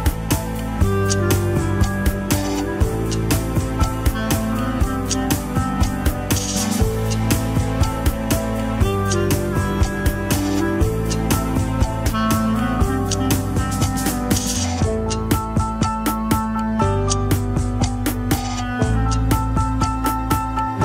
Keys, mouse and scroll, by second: 0.3 click, 1.0 shift+click, 1.5 shift+click, 1.8 scroll up 2, 2.0 g, 3.2 shift+middle click, 3.7 click, 3.9 g, 4.6 click, 5.0 click, 5.4 g, 6.7 KP_3, 7.2 g, 8.1-8.7 scroll down 2, 8.7 click, 9.0 g, 9.5-10.9 shift+middle drag, 10.9 click, 11.1 KP_3, 11.4 click, 14.6 click, 15.0 alt+z, 15.2 shift+middle click, 15.4 scroll up 1, 15.5 alt+z, 15.9 click, 17.6 KP_1, 17.8-18.6 scroll down 3, 18.6 scroll up 2, 19.2 shift+click, 19.7 click, 20.3 click, 20.5 g.